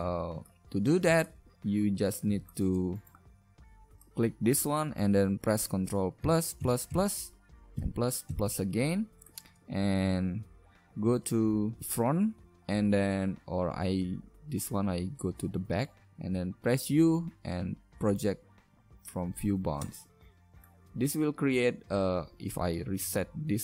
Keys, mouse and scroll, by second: 4.2-5.7 middle drag, 6.2 ctrl+KP_Add, 6.6 ctrl+KP_Add, 10.2 ctrl+KP_1, 16.7 u, 22.9 a, 23.1 a.